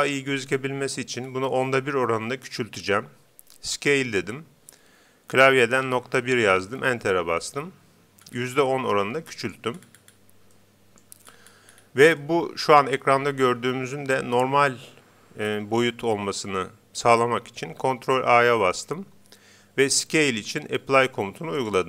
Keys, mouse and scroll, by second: 0.8 scroll down 1, 1.0 middle click, 1.2-3.2 middle drag, 3.7 s, 8.2-9.2 scroll up 1, 9.2-13.8 middle drag, 18.1 ctrl+a.